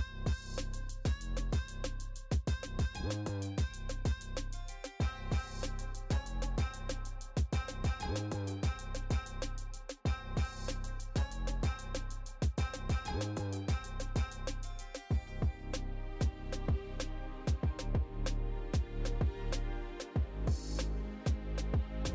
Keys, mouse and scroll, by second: 0.5-2.0 drag, 2.0 right click, 2.8 right click, 3.0 shift+middle click, 3.7 g, 5.3 drag, 5.3 right click, 5.6 middle click, 6.0 g, 6.9 r, 7.5 g, 8.0 middle click, 8.4 right click, 8.7 shift+middle click, 9.3 r, 9.8-11.5 scroll down 2, 10.0 g, 11.6 right click, 11.8 g, 13.0 a, 13.6 alt+g, 13.8 alt+r, 14.4 middle click, 14.4-15.8 scroll up 2, 15.8 right click, 16.1 shift+middle drag, 16.5 middle drag, 17.0-18.2 scroll up 1, 17.0 g, 18.2 middle click, 19.1-20.0 scroll down 3, 20.0-20.3 middle drag, 20.4-20.9 scroll up 2, 20.9 g.